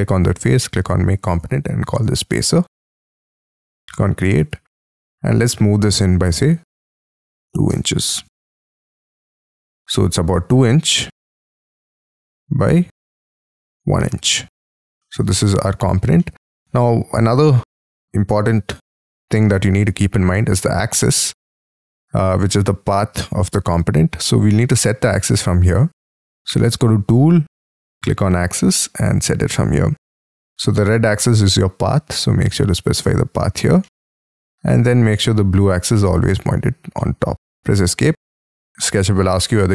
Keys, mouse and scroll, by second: 1.1-2.3 typing, 3.5 double click, 4.3 double click, 5.1 p, 6.7 2, 7.4 shift+', 7.6 Return, 8.1 space, 9.0 middle click, 10.0 t, 10.1-10.9 scroll up 4, 13.8 space, 14.0 middle click, 15.3 double click, 15.5 double click, 16.1 middle click, 19.3-19.8 scroll down 3, 19.8-20.9 scroll up 9, 20.9-21.3 scroll down 5, 21.3 middle click, 23.8-26.7 scroll down 3, 33.8 middle click, 36.9 middle click, 37.7 Escape.